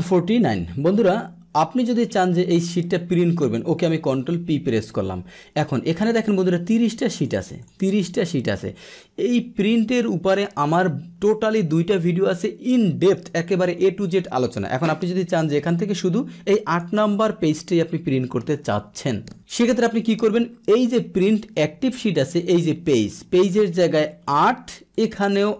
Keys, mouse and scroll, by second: 0.0 middle click, 0.0 click, 0.7 middle click, 1.9 middle click, 4.3 ctrl+p, 6.7 click, 7.1 click, 7.4 click, 8.2 click, 16.6 click, 22.4 click, 24.9 click.